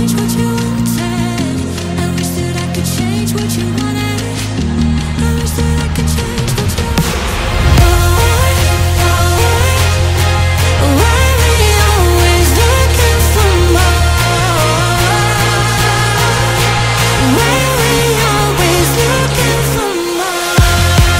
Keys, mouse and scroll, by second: 0.7-3.5 drag, 3.5-4.1 scroll up 9, 4.1-5.8 middle drag, 5.8 Tab, 6.3-6.7 scroll up 2, 6.7-9.5 middle drag, 9.5 scroll down 1, 11.0 scroll up 1, 11.7 click, 12.1-12.6 scroll up 2, 12.6-14.4 middle drag, 14.4 scroll down 3, 14.9-17.0 middle drag, 17.0-17.4 scroll up 2, 17.4-19.6 middle drag, 19.6 b.